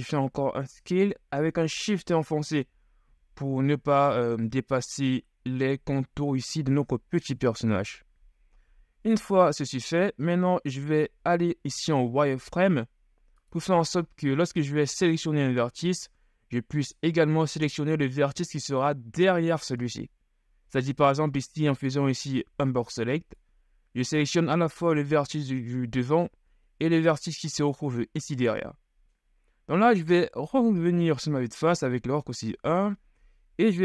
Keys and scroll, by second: 12.2 z, 22.7 b, 30.5 KP_1.